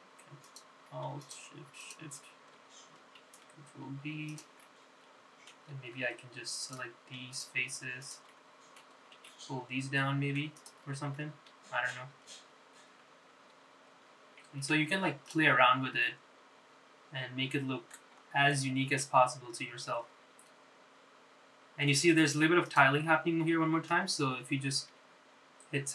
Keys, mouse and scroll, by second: 0.8 click, 1.6 alt+click, 2.3 alt+shift+click, 2.9 alt+shift+click, 4.4 ctrl+b, 5.8 middle click, 7.7 click, 7.7 3, 8.5 shift+click, 9.1 shift+click, 9.5 middle click, 10.3 e, 12.0 scroll down 1, 12.3 middle click, 13.2 scroll up 2, 13.9 scroll up 2, 15.3 scroll down 3, 15.9 Tab, 16.4 click, 16.7-17.0 scroll down 2, 17.1-19.1 middle drag, 19.3 scroll up 2, 20.1-23.0 middle drag, 23.3-23.8 scroll up 3, 23.8 click, 24.1 middle click, 25.2-25.9 scroll down 2.